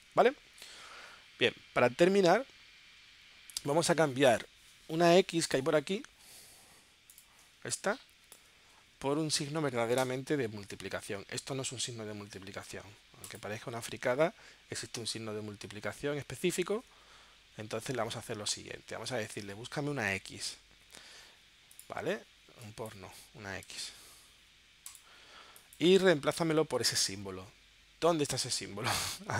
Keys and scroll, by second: 7.6 space, 17.9 super+f, 20.1 x, 23.7 x.